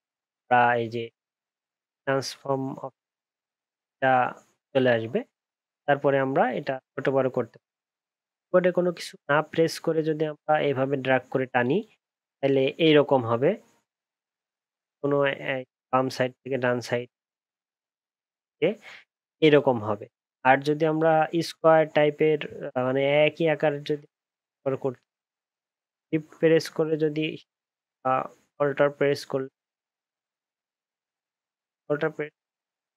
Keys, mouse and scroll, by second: 26.1 shift+click.